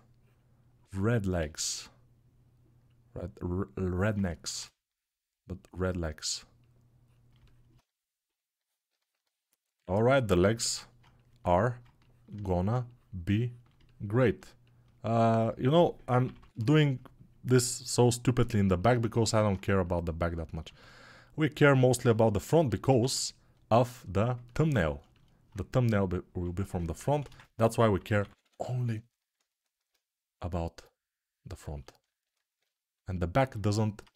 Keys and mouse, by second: 27.9 [.